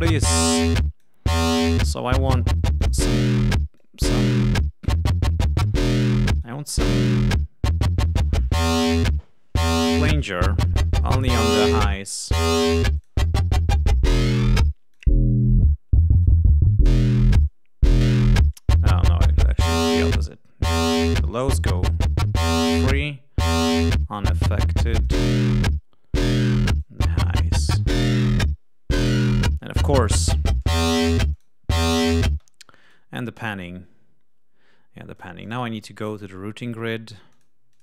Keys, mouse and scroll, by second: 1.6 click, 2.3 click, 2.7 click, 3.7 click, 6.3 right click, 10.1 click, 12.9 click, 14.2 click, 14.9 click, 16.1 click, 17.3 click, 19.0 click, 20.2-21.6 drag, 21.7 click, 23.0 click, 24.4 click, 25.4 click, 26.7 click, 28.2 click, 29.1 click, 30.1 click, 31.3 click, 32.2 space, 32.8 right click, 35.1 click, 36.1 click, 37.3 click, 37.7 click.